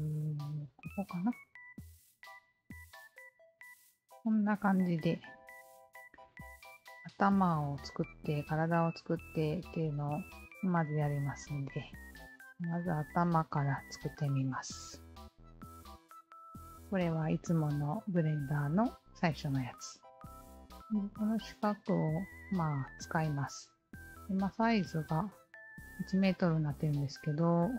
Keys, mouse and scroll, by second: 0.7-1.6 scroll up 1, 1.6 click, 2.4-4.3 scroll down 2, 5.7-7.2 scroll down 1, 7.2-8.9 scroll down 2, 11.3-12.8 scroll up 1, 13.6 click, 15.7-17.3 alt+drag, 18.4 alt+click, 20.5-22.4 alt+drag.